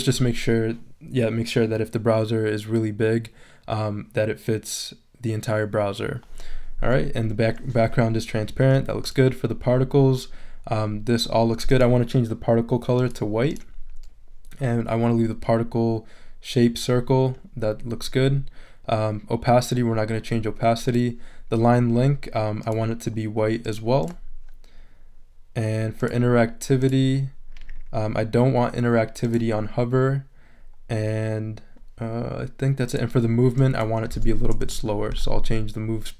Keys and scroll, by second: 34.1 3, 34.6 Return.